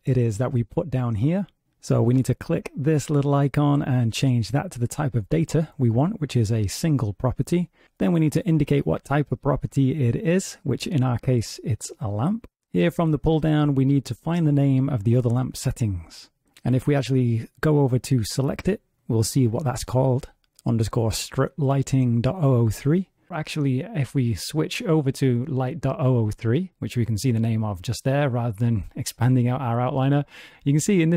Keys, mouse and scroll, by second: 17.9 click, 19.1 click, 21.9 click.